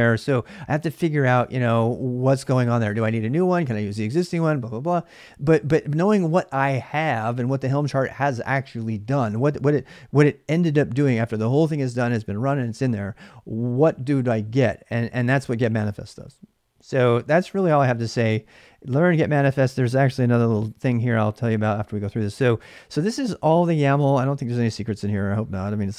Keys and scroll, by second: 23.8 space.